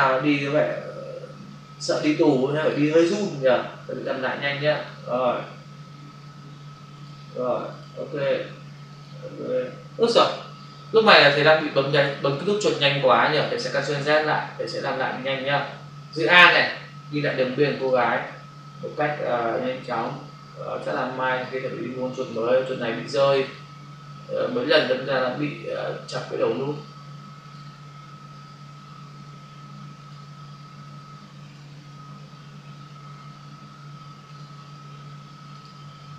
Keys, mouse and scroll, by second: 2.0 click, 2.7 double click, 2.9 Delete, 4.0 click, 4.7 click, 4.8 double click, 5.6 Delete, 7.0 click, 7.6 click, 7.8 double click, 8.8 click, 9.0 double click, 13.8 ctrl+alt+z, 16.5 alt+click, 20.0 click, 22.1 click, 23.4 click, 24.6 click, 25.6 click, 26.6 click, 27.3 double click, 30.0 click, 34.3 click.